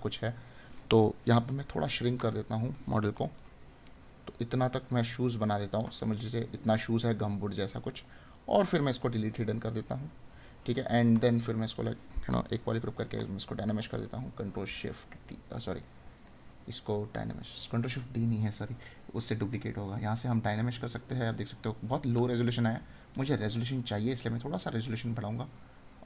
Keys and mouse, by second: 5.9 right click, 10.4 right click, 13.2 right click, 22.1 right click.